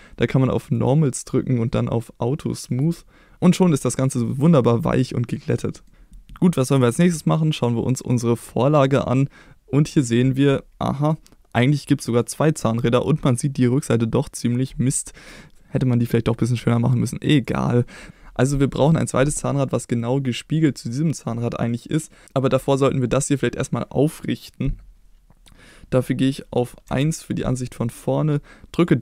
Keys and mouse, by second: 0.9 click, 2.7 click, 3.6-4.6 middle drag, 5.0 middle click, 5.7 middle click, 26.9 KP_1, 28.8 click.